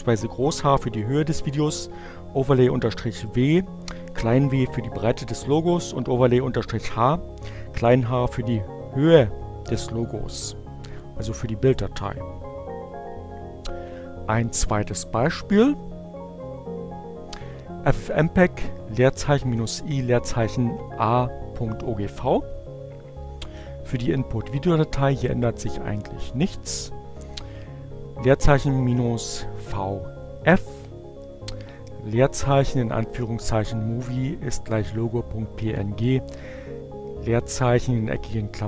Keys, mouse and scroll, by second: 14.6 click, 15.5 Up, 16.6 Up.